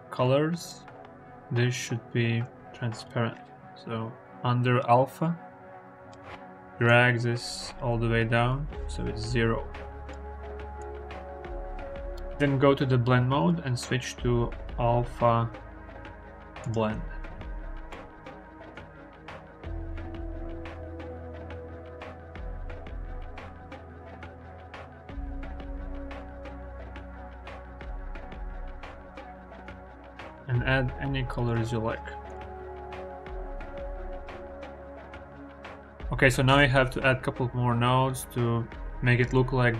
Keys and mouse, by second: 9.9 click, 13.3-16.6 drag, 17.9-22.0 middle drag, 22.0 click, 22.1 middle drag, 22.4 click, 22.6-28.4 middle drag, 28.4-30.0 drag, 32.1 click, 32.4 g, 32.7 y.